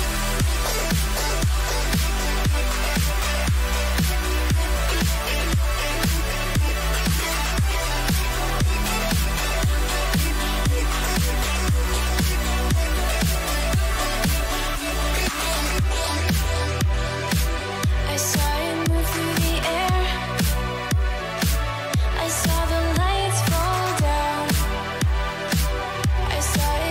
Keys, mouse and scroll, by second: 0.0 a, 0.3 a, 0.6 a, 1.2 middle click, 3.0-4.9 right drag, 3.5 Tab, 4.2 a, 4.5 a, 4.9 Tab, 7.2-11.0 drag, 11.0-13.2 middle drag, 13.9 middle click, 16.1-18.3 drag, 17.1-18.3 middle drag, 17.5 Tab, 18.3 a, 18.6 a, 19.1-21.4 middle drag, 23.3-26.2 middle drag.